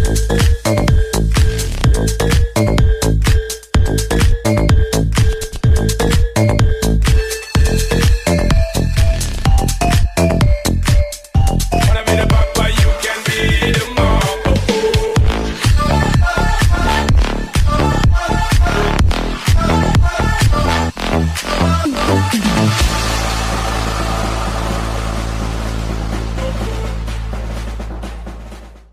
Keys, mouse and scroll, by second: 0.5 alt+click, 4.0 alt+scroll down 1, 4.2 alt+scroll up 1, 4.9 scroll down 1, 4.9 alt+scroll up 1, 5.0 scroll down 1, 5.2-5.8 scroll up 1, 5.8 scroll up 1, 5.9 ctrl+click, 8.6 alt+scroll down 1, 8.9 alt+scroll up 1, 11.0 alt+right click, 12.1 alt+click, 13.4 double click, 13.8 alt+right click, 15.0 double click, 16.5 alt+right click, 16.9 alt+click, 18.3 alt+right click, 18.4 alt+click, 19.0 alt+click, 19.7 alt+click, 20.1 ctrl+d, 20.2 alt+scroll, 20.4 alt+scroll down 6, 20.7-21.2 alt+scroll up 2, 21.1 alt+right click, 21.6 alt+click, 24.4-24.7 alt+scroll up 1, 25.9 alt+click, 28.2 click.